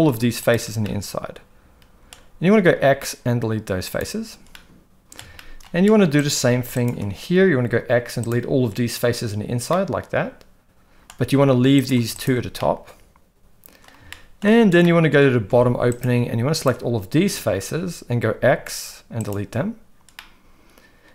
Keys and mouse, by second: 0.4 ctrl+shift+click, 0.8-2.1 middle drag, 2.5 x, 4.6 middle click, 5.4 shift+middle click, 6.2 click, 6.8 ctrl+shift+click, 7.6 x, 9.7-11.1 middle drag, 11.8 click, 12.1 shift+click, 12.6-13.8 middle drag, 14.1 shift+middle click, 14.8 middle click, 15.5 alt+a, 16.5 ctrl+shift+click, 18.3 x, 20.1-21.1 middle drag.